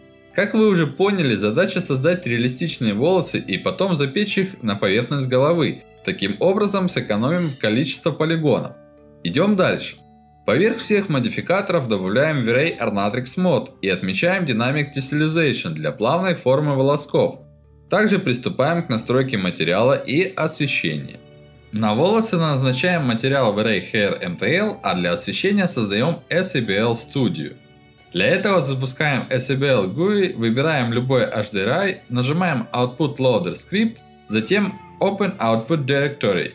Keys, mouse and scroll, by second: 6.5 alt+middle click, 8.6 alt+middle click, 10.6 click, 11.4-12.8 alt+middle drag, 14.0 click, 14.6-17.7 alt+middle drag, 17.9-19.0 middle drag, 19.3 middle click, 19.8 click, 20.4 middle click, 22.9 click, 25.6 click, 27.3 click, 33.8 click, 35.4 click, 35.7 click, 36.1 click, 36.3 ctrl+c.